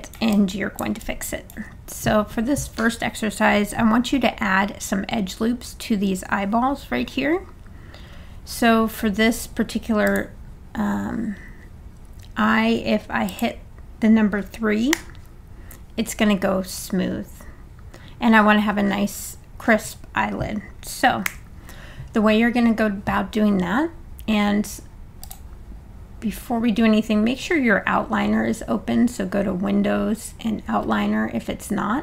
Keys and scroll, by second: 14.9 3, 21.3 1.